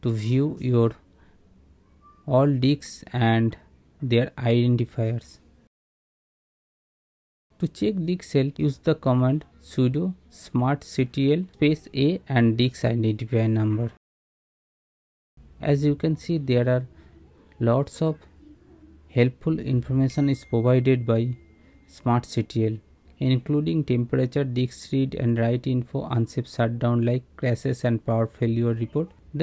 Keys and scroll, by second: 11.3 Return, 15.0 Return.